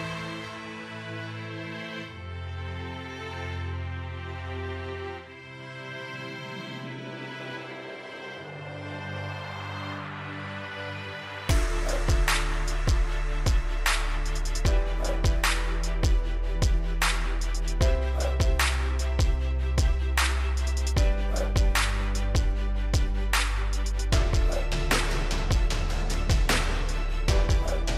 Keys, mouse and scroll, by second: 0.6 click, 4.3 right click, 5.8 click, 15.8 right click, 16.9 click, 20.9 right click, 21.5 click, 25.2 click.